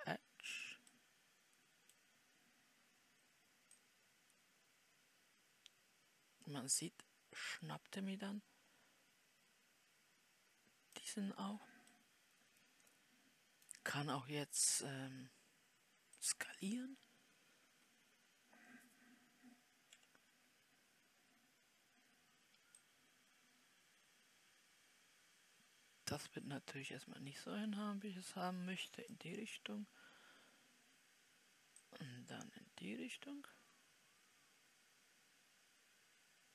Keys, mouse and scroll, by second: 2.0-20.3 middle drag, 20.3 KP_7, 23.2-36.5 drag.